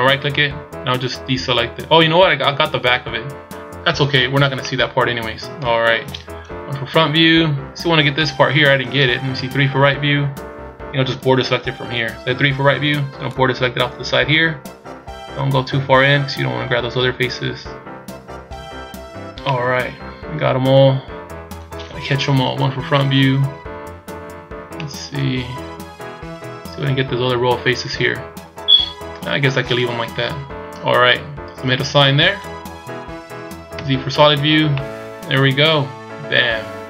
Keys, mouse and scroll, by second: 0.4 middle click, 3.4 scroll down 2, 4.6 middle click, 6.4 KP_1, 7.0 scroll up 2, 8.1 middle click, 9.3 KP_3, 10.0 scroll up 1, 12.8 b, 19.5 middle click, 21.0 middle click, 22.1 KP_1, 24.7 middle click, 26.7-27.9 scroll up 4, 28.5 scroll down 3, 30.1 KP_1, 31.0-31.5 scroll down 1, 32.5 click, 33.7 z, 34.3 scroll down 1, 34.7 middle click.